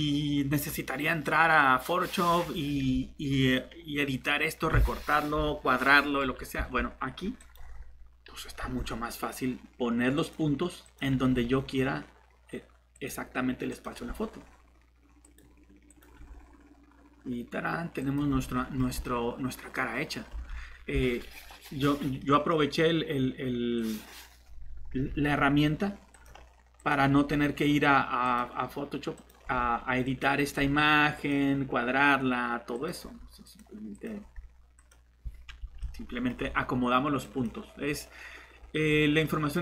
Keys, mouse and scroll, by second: 6.6 Tab, 8.6 g, 11.1 g, 13.9 g, 16.1 g, 18.8 Tab, 20.3 Tab, 24.9 g, 27.1 g, 29.4 g, 30.4 g, 33.0 g, 34.2 g, 35.6 Tab, 36.4 Tab.